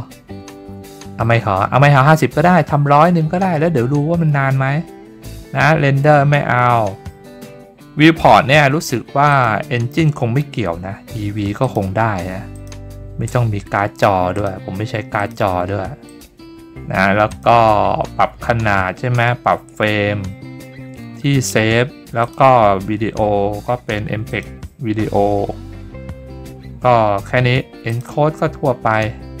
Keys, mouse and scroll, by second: 7.3-8.4 scroll up 3, 7.4 middle click, 9.3 click, 11.6 click, 12.5 click, 14.3 click, 15.2 click, 16.0 click, 17.3 click, 18.7-19.0 scroll down 5, 19.8-21.6 scroll down 7, 21.6 scroll down 1, 22.2 click, 24.3 click, 25.2-25.6 scroll down 4, 27.9 click, 28.3-29.4 scroll down 3.